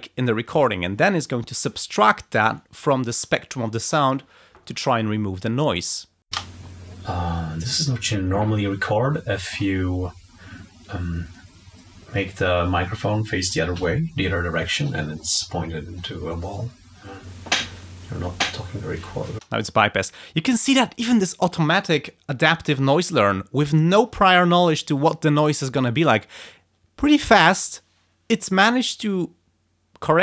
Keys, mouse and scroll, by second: 6.2 space, 17.1 click, 19.3 space.